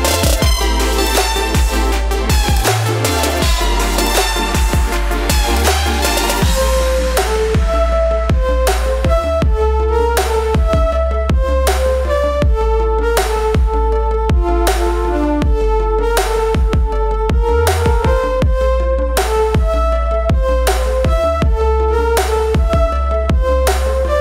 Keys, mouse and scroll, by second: 4.5 Return, 9.9 click, 14.6 Return, 16.6 click, 19.0 click.